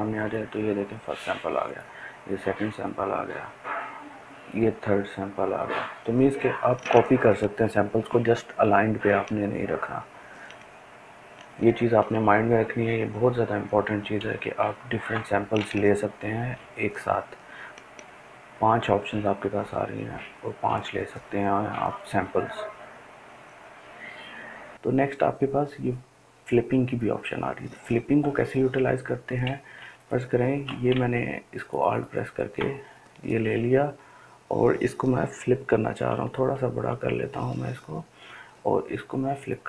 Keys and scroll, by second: 37.3 ], 37.8 ], 38.1 ].